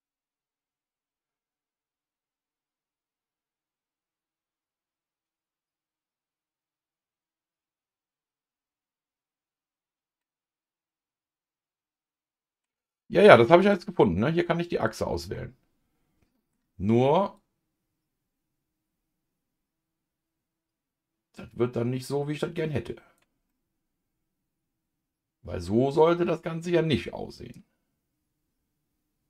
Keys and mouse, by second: 10.2-12.6 middle drag, 13.6 click, 14.9 click, 15.3-16.5 middle drag, 17.3-23.5 drag, 23.5-29.2 middle drag.